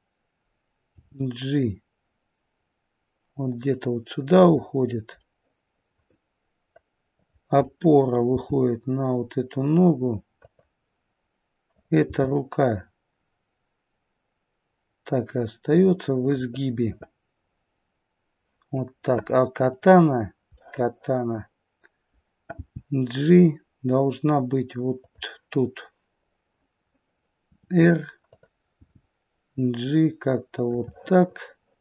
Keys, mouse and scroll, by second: 0.9 g, 5.1 middle click, 7.1 click, 7.6 middle click, 8.2 g, 11.6 click, 12.2 g, 19.6 click, 20.5 middle click, 22.5 g, 26.1 middle click, 27.5 r, 28.8 g, 30.9 middle click.